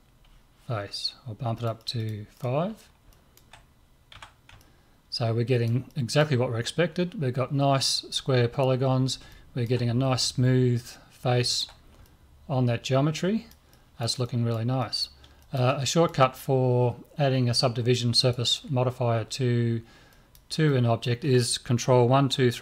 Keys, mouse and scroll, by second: 1.6-5.0 drag, 4.2 a, 7.7-9.3 middle drag, 12.0 middle click, 16.2-17.7 middle drag, 18.2 right click, 20.1-22.5 middle drag.